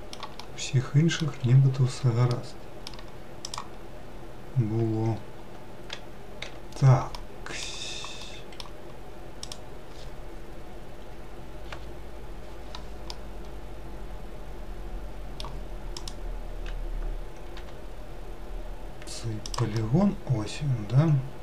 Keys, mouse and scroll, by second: 1.8 1, 2.3-3.5 middle drag, 3.5 click, 6.5 3, 7.2-9.5 middle drag, 9.5 click, 11.7 KP_Decimal, 13.1-16.0 middle drag, 16.0 click, 17.6 g, 19.8-21.4 middle drag.